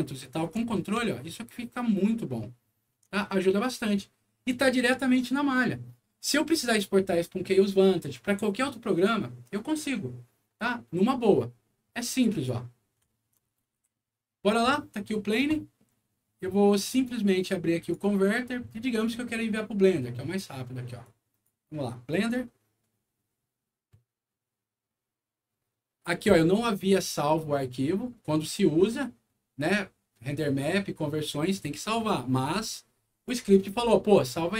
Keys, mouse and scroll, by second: 0.0 alt+middle click, 0.9-2.8 alt+middle drag, 3.2 alt+middle click, 12.2 click, 13.0 alt+middle click, 13.4 alt+scroll down 1, 13.7 w, 13.8 middle click, 17.7 click, 20.9 click, 32.6 click.